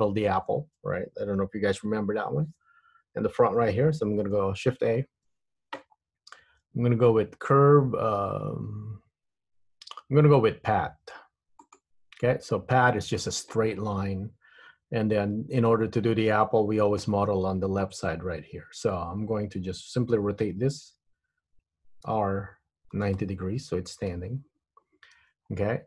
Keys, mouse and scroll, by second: 4.9 shift+a, 22.2 r, 25.4 scroll up 2, 25.6-25.8 scroll down 4.